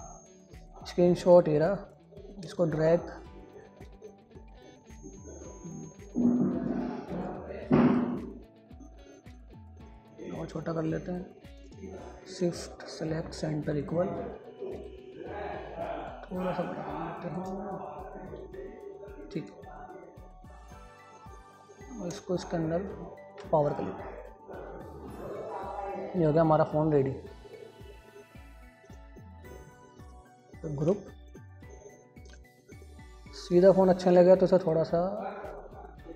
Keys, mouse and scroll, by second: 0.0 super+d, 0.9-5.3 drag, 5.3 scroll down 1, 5.4 typing, 6.5 scroll up 1, 7.6-9.0 drag, 8.9 scroll up 1, 9.5-12.4 drag, 13.6-14.0 typing, 14.2 click, 14.6-15.0 scroll up 1, 15.1-18.0 drag, 18.0 scroll up 1, 22.2 shift+Page_Down, 23.6 alt+z, 24.0 click, 25.0 scroll down 1, 27.0-28.2 scroll up 1, 28.2-28.7 scroll down 1, 28.7-31.1 drag, 31.1 ctrl+g, 31.6 click, 35.0-36.1 drag.